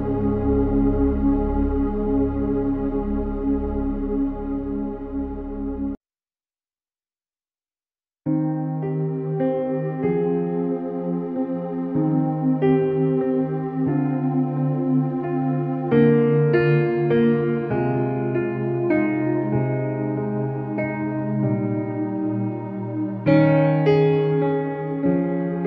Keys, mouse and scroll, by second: 0.5 ctrl+d, 1.2 ctrl+=, 2.2 click, 2.4 ctrl+=, 3.1-3.5 click, 4.2 ctrl+=, 4.8 ctrl+=, 5.1 space, 5.4 click, 5.5-5.8 space, 5.9 alt+s, 7.5-7.9 click, 13.9 click, 14.0 click, 19.1-21.2 typing, 21.8-23.9 drag, 24.1 ctrl+shift+f, 24.7 click.